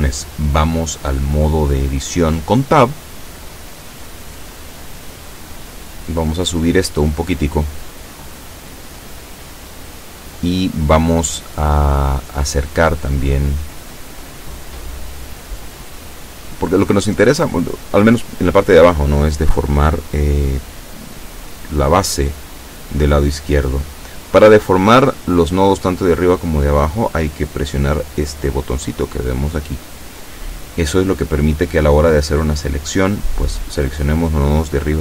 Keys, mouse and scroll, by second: 4.6-9.1 shift+middle drag, 30.6-31.8 drag, 33.7-35.0 middle drag.